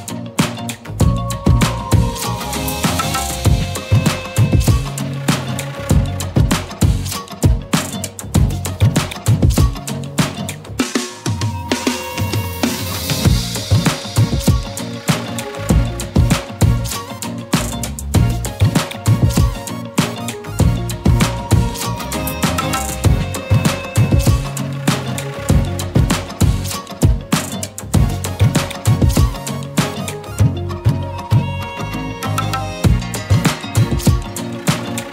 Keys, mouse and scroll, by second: 1.1 middle click, 2.0 scroll up 2, 2.5 click, 2.7 Tab, 3.1 middle click, 3.2 scroll up 2, 4.0 s, 5.9-7.6 middle drag, 7.6-8.4 scroll up 5, 7.9 shift+middle click, 8.8 click, 9.4 middle click, 10.7 KP_7, 11.4 z, 11.8 click, 14.6 click, 15.5 g, 15.7 r, 16.4 click, 17.6 s, 22.7 i, 24.7 Tab, 25.7 right click, 26.5-28.2 middle drag, 28.2 Tab, 29.5 alt+shift+click, 29.5 middle click, 30.1 click, 30.5-31.0 scroll down 5, 31.0-33.2 middle drag, 33.2 KP_Divide, 34.3-35.1 middle drag.